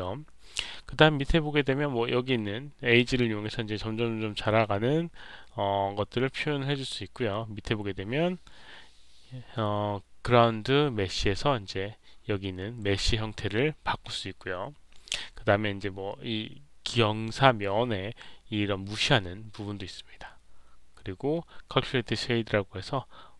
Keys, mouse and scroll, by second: 2.9-6.8 drag.